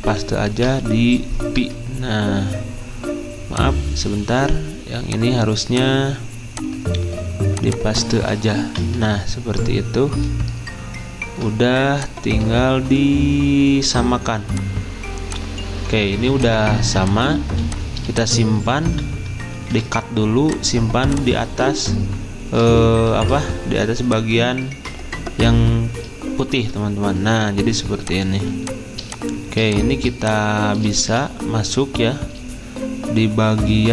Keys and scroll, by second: 0.5 ctrl+v, 1.6 Return, 8.6 ctrl+v, 9.6 Return, 19.4-20.1 typing, 21.6 ctrl+z, 24.7 ctrl+z, 26.4 ctrl+f, 29.7 z, 30.2 space, 31.0 v.